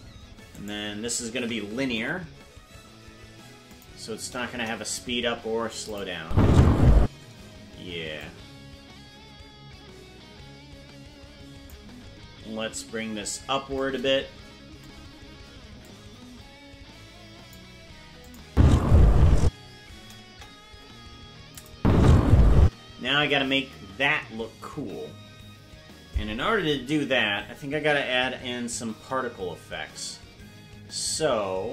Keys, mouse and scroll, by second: 0.5 right click, 1.9 t, 4.5 KP_0, 5.9 click, 6.2 space, 6.9 space, 8.2-11.7 drag, 15.8-17.5 drag, 18.2 click, 18.5 space, 19.4 space, 20.2 KP_0, 21.5 click, 21.7 space, 28.9 KP_0.